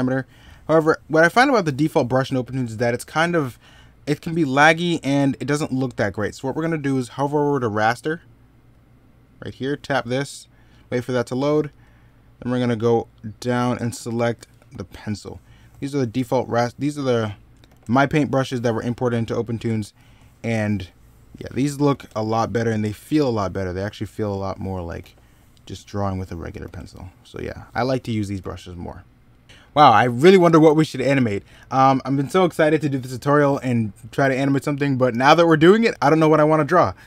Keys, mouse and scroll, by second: 2.0 ctrl+z, 17.4 ctrl+z, 21.7 ctrl+z, 24.7 ctrl+z, 27.5 ctrl+z, 28.2 ctrl+z, 28.5 middle click, 34.6 middle click.